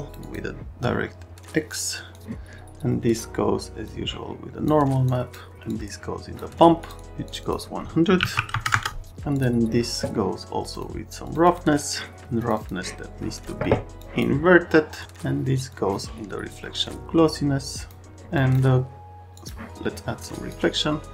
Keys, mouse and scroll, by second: 0.1 click, 1.9 click, 3.8 click, 5.0 click, 5.7 click, 6.8 click, 6.9 click, 7.3 click, 7.4 click, 8.2 KP_1, 8.3 KP_0, 8.6 KP_0, 8.8 KP_Enter, 9.3 click, 10.7 click, 11.2 click, 11.4 click, 12.4 click, 12.5 click, 14.0 click, 15.0 click, 15.7 click, 18.3 click, 19.4 click, 20.3 click.